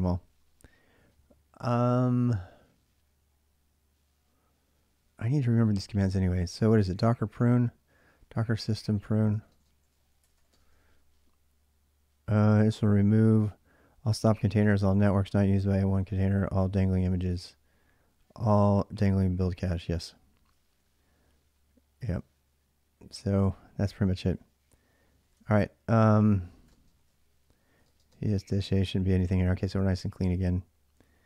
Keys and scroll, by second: 6.7-10.9 typing, 19.9 y, 20.3 Return, 24.7-30.8 typing.